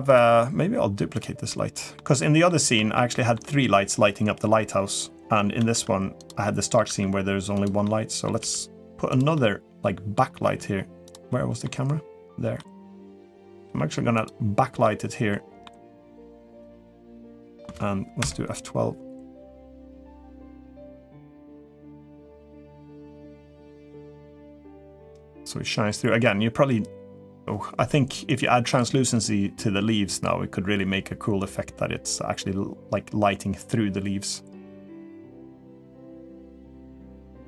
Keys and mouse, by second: 0.0-1.0 drag, 1.3-1.7 middle drag, 2.0-2.3 middle drag, 2.7-3.1 shift+middle drag, 5.4 shift+d, 6.2 middle click, 6.6 r, 7.6 middle click, 8.2 r, 9.1 middle click, 10.2 r, 11.0-11.4 middle drag, 12.3-12.7 middle drag, 12.9 r, 13.4 g, 14.6 middle click, 15.6 g, 16.6 middle click, 17.2 middle drag.